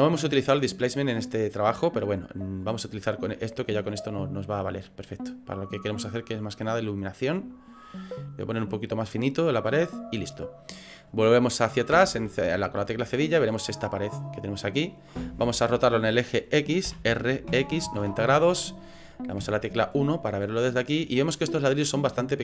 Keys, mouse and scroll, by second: 2.0 click, 2.4-2.8 scroll down 10, 3.2 middle click, 3.8 scroll up 4, 4.6 scroll down 2, 5.9 click, 8.6 middle click, 9.4 scroll up 2, 9.9 scroll down 3, 10.5 middle click, 12.0 KP_Divide, 12.7 scroll down 3, 13.4 middle click, 17.0 r, 19.4 KP_1, 20.2 scroll up 4, 20.7 scroll down 1, 21.3 shift+middle click, 22.2 shift+middle click.